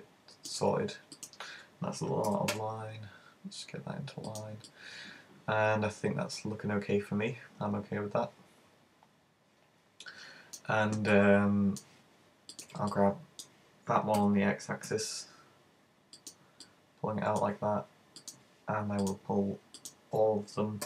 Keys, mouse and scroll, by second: 1.1 right click, 2.3 super+g, 4.4 click, 4.7 middle click, 11.2 middle click, 12.6 right click, 12.9 middle click, 14.2 g, 16.3 click, 16.7 middle click, 18.3 right click, 19.1 shift+right click, 19.9 shift+right click.